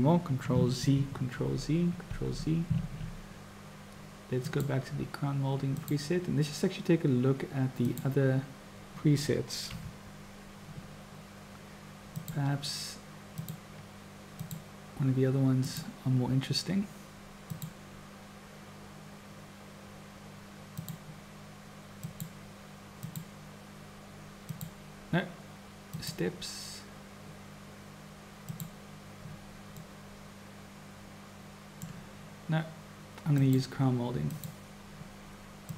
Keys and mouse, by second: 0.7 ctrl+z, 1.3 ctrl+z, 4.4-6.0 drag, 7.9 click, 9.6 KP_7, 12.0-12.6 drag, 13.4-14.6 drag, 15.6 click, 17.5-21.0 drag, 22.2 click, 23.0 click, 24.5-26.2 drag, 28.5 click, 29.8 click, 29.8 middle click, 30.3-31.9 drag, 33.4-34.5 drag, 35.6-35.7 drag.